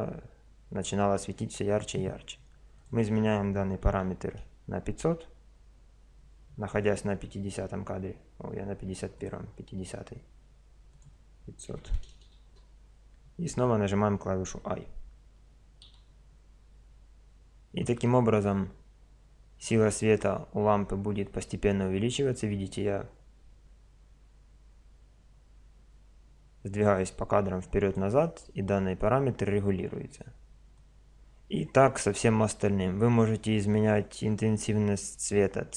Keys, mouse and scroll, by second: 2.8 click, 4.3 middle click, 4.4 click, 4.5 middle click, 4.6 KP_0, 9.2 click, 10.9-12.1 middle drag, 12.1 click, 12.1 KP_0, 12.7 middle click, 15.9 i, 19.6-21.5 drag, 30.7-32.5 drag.